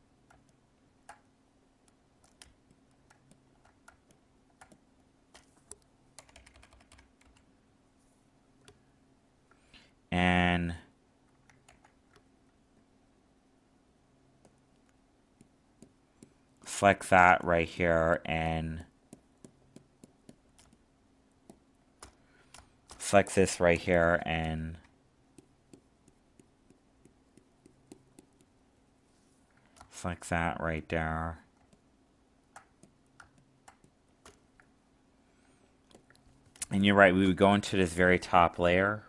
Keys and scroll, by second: 11.6 ctrl+z, 31.6 alt+space.